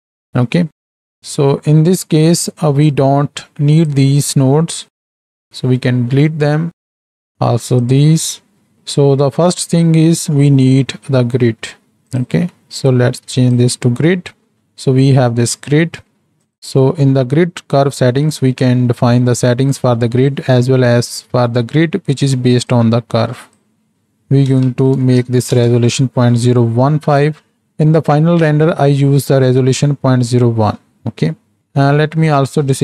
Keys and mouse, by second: 1.0 middle click, 2.4 middle click, 2.8-5.6 drag, 5.1 Delete, 5.6 middle click, 6.3 middle click, 6.8 click, 7.5 Delete, 7.8 click, 8.3 Delete, 8.7 middle click, 13.5-16.6 drag, 17.2 middle click, 22.7 click, 23.9-25.8 drag, 32.2 middle click.